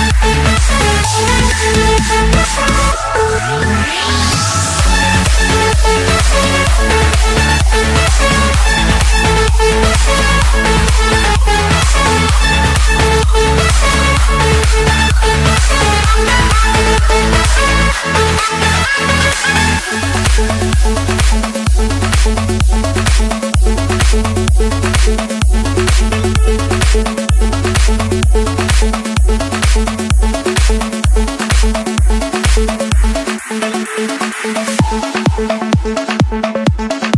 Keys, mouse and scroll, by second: 0.2 click, 0.8 Escape, 2.9-4.0 typing, 4.4 Return, 5.7-8.0 drag, 8.2 click, 8.4 Return, 9.5 Escape, 11.4 click, 12.3 click, 12.5 middle click, 12.6 middle click, 13.3 click, 13.5 Escape, 14.3 F7, 14.8 Escape, 15.0 Escape, 17.2 click, 18.0 click, 18.7 scroll, 19.6 click, 19.9 scroll, 20.9-21.5 scroll, 21.0 click, 22.4 click, 23.1 click, 23.4-24.3 scroll, 24.7 click, 25.3 middle click, 26.4 click, 27.3 click, 27.5 middle click, 27.6 middle click, 28.5 Escape, 30.1-31.9 typing, 32.2 Return, 34.3-35.4 drag, 35.8 r, 36.1 Return.